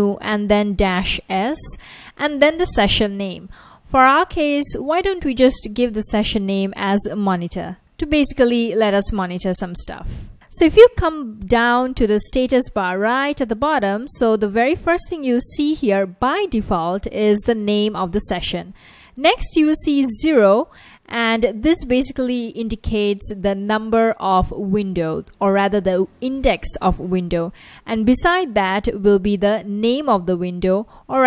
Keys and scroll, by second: 0.0-2.1 typing, 5.2-8.3 typing, 9.4 Return, 12.8 F1, 14.7 F1, 15.0 F1, 17.4 F1, 17.9 F1, 19.3 F1, 27.8 F1, 30.2 F1.